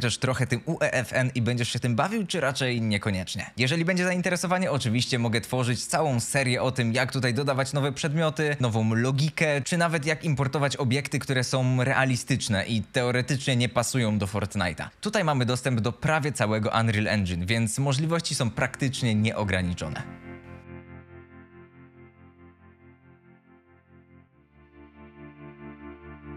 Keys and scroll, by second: 4.7-7.4 typing, 12.9 a.